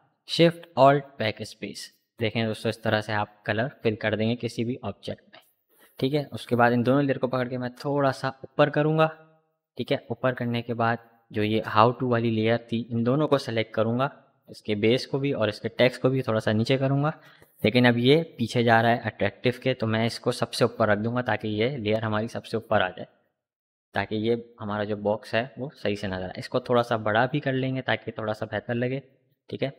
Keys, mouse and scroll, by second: 3.8 click, 4.9 v, 5.4-14.9 drag, 15.6-16.8 shift+drag, 16.8-20.9 shift+drag, 20.9 shift+Up, 21.5 Down, 22.7 click, 23.7 ctrl+t, 24.8-26.8 alt+drag, 26.8-29.7 alt+shift+drag.